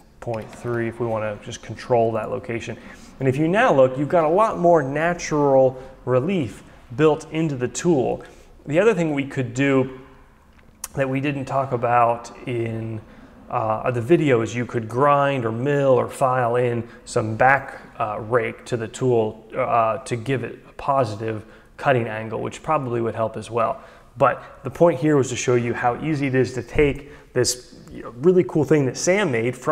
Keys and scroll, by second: 0.4 Delete, 0.5 3, 0.6 Return.